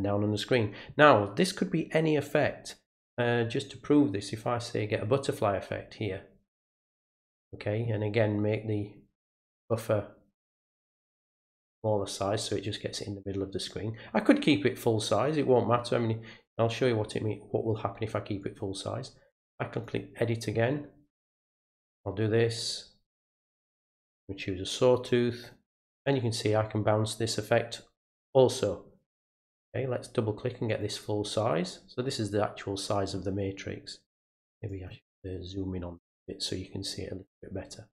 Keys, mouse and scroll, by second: 4.9-6.0 drag, 6.9 click, 9.0 click, 10.8-12.3 drag, 12.6-13.6 drag, 17.1 click, 18.4 right click, 19.8 click, 21.5 click, 23.4 click, 24.2 click, 25.4 click, 29.4 click, 29.6 click, 30.7 right click, 34.7 click, 35.2-35.7 scroll up 4.